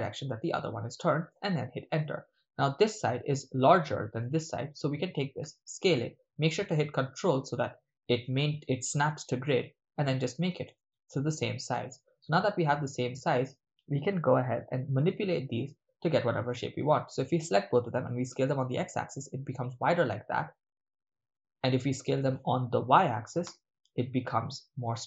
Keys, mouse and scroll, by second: 1.3 Return, 4.1 right click, 5.4 s, 10.7 ctrl+click, 11.8 right click, 12.9 shift+click, 12.9 shift+right click, 15.0 click, 15.0 right click, 17.1 shift+click, 17.1 shift+right click, 18.0 s, 18.3 x, 22.0-23.0 right drag, 23.0 s, 23.4 y.